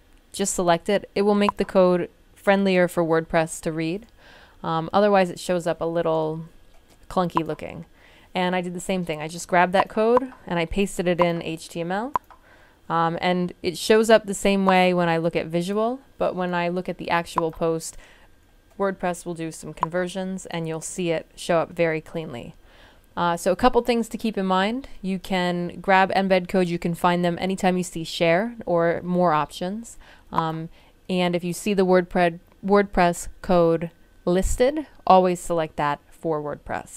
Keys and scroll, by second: 2.5 super+c.